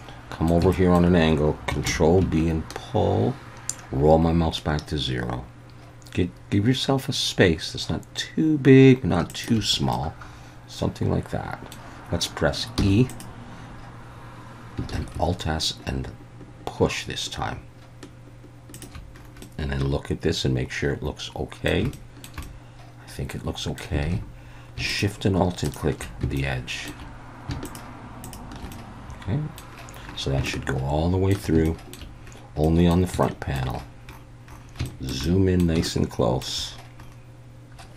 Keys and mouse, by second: 0.7 shift+middle click, 1.9 ctrl+b, 9.3 shift+click, 9.9-11.7 middle drag, 12.8 e, 13.1 click, 14.9 alt+s, 18.7 shift+click, 19.4-21.7 middle drag, 21.9 shift+middle click, 22.4-23.8 middle drag, 23.6 typing, 24.0 alt+a, 24.9 alt+shift+click, 25.6 alt+shift+click, 26.4 shift+middle click, 27.6 alt+shift+click, 28.2 alt+shift+click, 28.7 middle click, 30.5 shift+middle click, 31.7 shift+middle click, 32.6 middle click, 33.2 shift+middle click, 34.9 shift+middle click, 35.2 middle click, 35.9 shift+middle click.